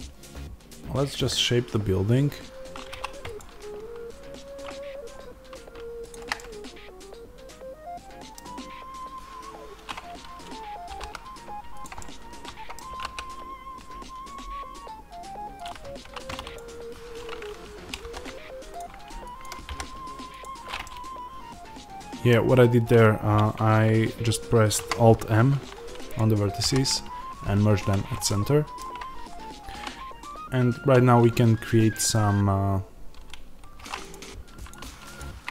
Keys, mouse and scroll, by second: 2.8 2, 3.3 click, 6.3-11.7 middle drag, 10.8 e, 11.7 click, 11.9-15.5 middle drag, 12.8 s, 15.5 click, 15.9 1, 16.4 click, 18.6 alt+m, 19.3 click, 20.3 alt+m, 20.7-26.0 middle drag, 26.0 click, 28.2-34.0 middle drag, 29.6 2, 33.0 3, 33.7 2, 34.0 click.